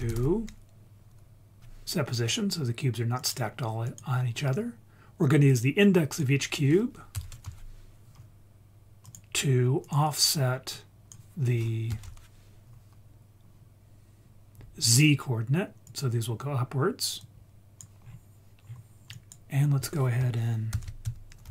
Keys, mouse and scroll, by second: 3.8 click, 4.3 scroll up 2, 5.5-9.1 drag, 9.8 click, 10.7 click, 10.8-15.0 drag, 15.8 click, 17.2-17.8 drag, 18.0-18.6 scroll down 1, 18.6-19.1 scroll down 3, 19.1 click, 19.6-20.1 scroll up 2, 20.7 shift+a.